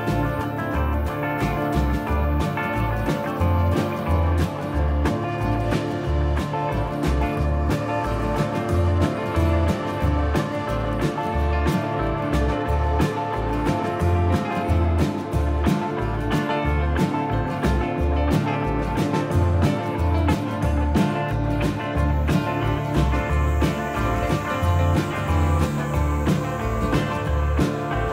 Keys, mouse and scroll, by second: 0.6 scroll up 4, 1.0 shift+middle click, 1.3-1.7 scroll up 2, 2.0 middle click, 3.2 click, 7.0 middle click, 7.8-8.7 scroll down 7, 8.5 shift+middle click, 8.7 middle click, 10.1 middle click, 10.1-10.6 scroll up 1, 11.8 shift+h, 12.2 middle click, 12.9 shift+middle click, 13.3 middle click, 14.5 shift+middle click, 15.2 middle click, 16.3 z, 20.0 ctrl+KP_1, 21.4 Tab, 22.0-22.4 scroll up 2, 22.4 shift+middle click, 23.0-23.8 scroll down 1, 24.0 alt+a, 25.6 b.